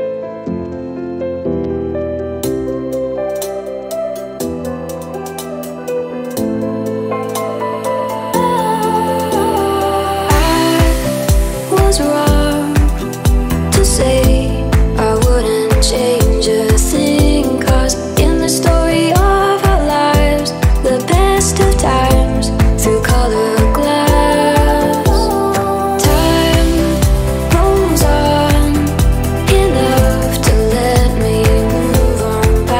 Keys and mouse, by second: 0.0 click, 0.5 ctrl+a, 4.3 drag, 6.0 click, 6.3-7.4 drag, 7.9-9.0 drag, 9.0-11.8 middle drag, 11.8-18.0 drag, 21.1-24.8 drag, 24.8-28.6 middle drag, 28.6-29.8 drag, 29.8 ctrl+a, 31.6 r.